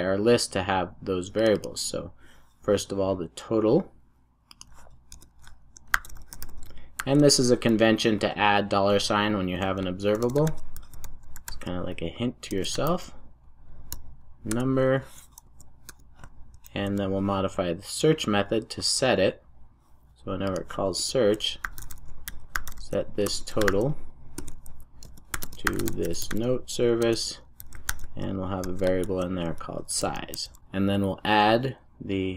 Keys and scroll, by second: 12.5 Return, 16.6 super+s, 24.3 Return, 30.4 super+s.